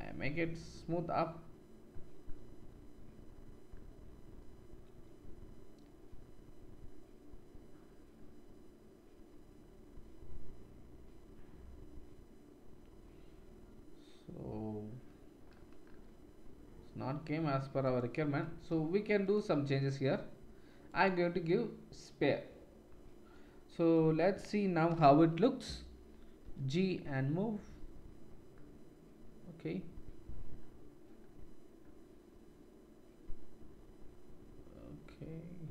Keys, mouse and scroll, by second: 3.7-19.3 middle drag, 19.3-35.7 drag, 25.0 KP_1, 26.4 g.